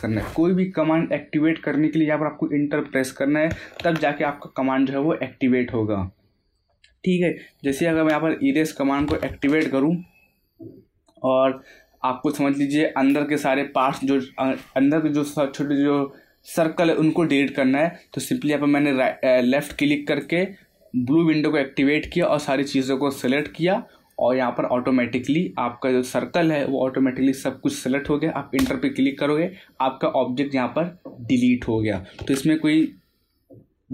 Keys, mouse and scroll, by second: 3.5 Return, 3.8 ctrl+z, 5.9 scroll up 1, 6.5 middle click, 7.4-9.8 typing, 10.7-13.8 middle drag, 20.0 click, 23.2 click, 28.5 Return, 31.9 Return, 32.1 ctrl+z.